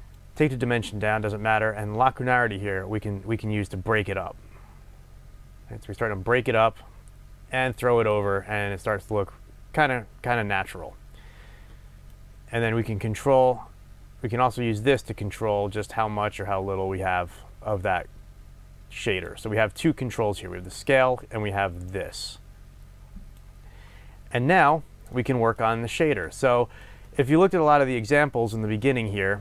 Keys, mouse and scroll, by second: 24.2-25.0 scroll down 2, 25.0-29.4 middle drag.